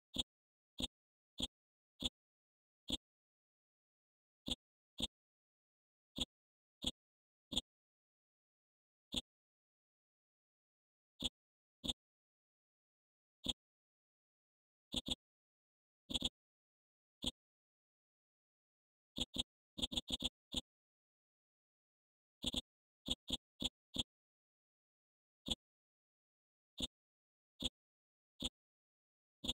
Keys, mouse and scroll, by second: 4.4 alt+click, 6.1 click, 8.6-9.1 scroll up 1, 9.1 click, 9.9-10.5 scroll down 1, 10.5-11.2 scroll up 1, 11.2-13.4 drag, 13.4 click, 14.0-14.9 scroll down 1, 14.9 click, 16.5-17.2 scroll up 1, 17.2 click, 17.9-18.8 scroll down 1, 19.1 click, 21.3-21.7 scroll down 1, 22.4-29.4 drag.